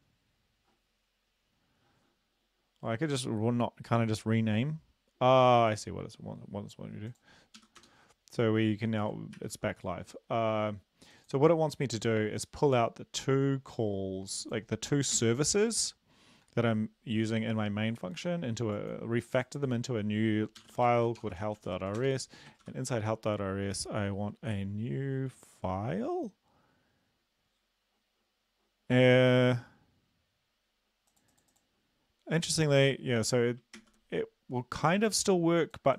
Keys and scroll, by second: 7.6 Up, 7.9 Return, 9.4 ctrl+`, 15.2 ctrl+x, 20.6-21.7 typing, 22.0 Return, 22.9 ctrl+v, 33.8 ctrl+s.